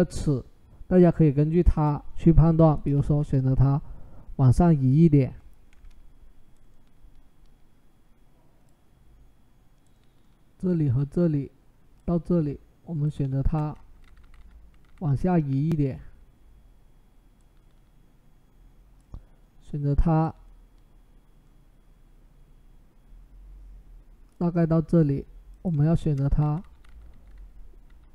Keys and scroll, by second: 3.2 Up, 3.4 Up, 4.3 Up, 13.8 Down, 13.9-14.6 typing, 26.2 Down, 26.5-28.0 typing.